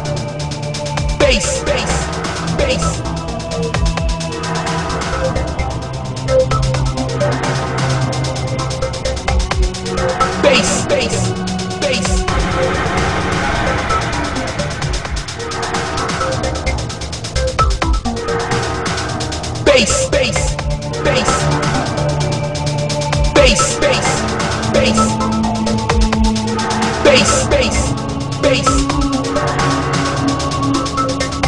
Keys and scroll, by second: 1.9 alt+space, 3.3 alt+space, 4.1 alt+space, 6.6 ctrl+z, 7.0 alt+space, 8.1 alt+space, 8.5 alt+space, 16.7 alt+space, 17.1 alt+space, 17.9 alt+space, 18.4 alt+space, 18.5 ctrl+z, 18.9 alt+space, 19.3 alt+space, 20.0 alt+space, 21.4 alt+space, 22.9 alt+space, 23.8 alt+space, 25.3 alt+space, 31.1 ctrl+z.